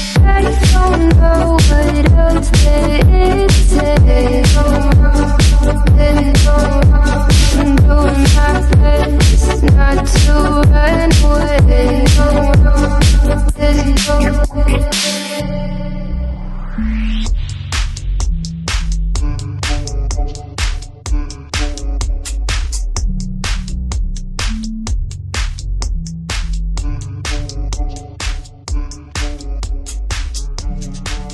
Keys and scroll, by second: 16.8 super+t, 23.6 Return, 29.0 shift+super+].